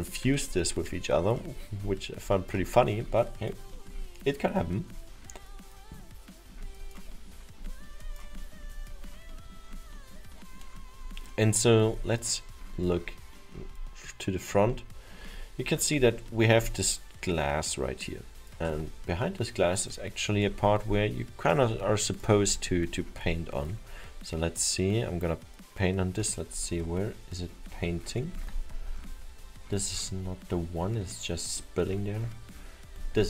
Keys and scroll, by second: 15.9 alt+7.